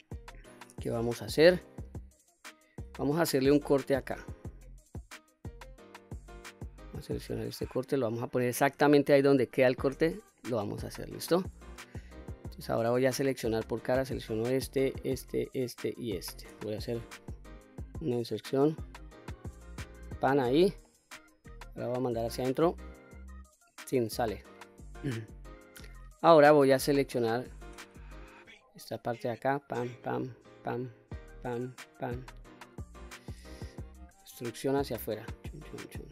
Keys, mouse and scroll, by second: 1.7-2.8 middle drag, 3.7 ctrl+r, 7.9 click, 9.4 ctrl+r, 10.4 click, 11.1-12.1 middle drag, 13.4 3, 13.8 click, 14.8 shift+click, 15.4 shift+click, 15.9 shift+click, 16.9 i, 20.0 click, 20.3-20.8 middle drag, 21.6 e, 23.7 click, 24.1-24.6 middle drag, 24.9-25.3 scroll up 2, 27.0 3, 27.5 click, 28.7 shift+click, 29.7 shift+click, 30.3 shift+click, 31.2 shift+click, 31.8 shift+click, 32.3 shift+click, 33.0 shift+click, 33.5 middle click, 34.3 e.